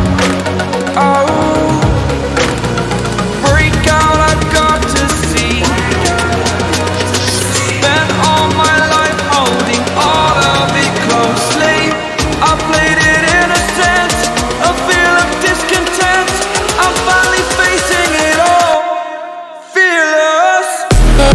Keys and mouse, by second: 1.1 click, 2.2 click, 5.5-6.4 typing, 8.8 Return, 14.5 click, 19.5 ctrl+g, 20.0 click.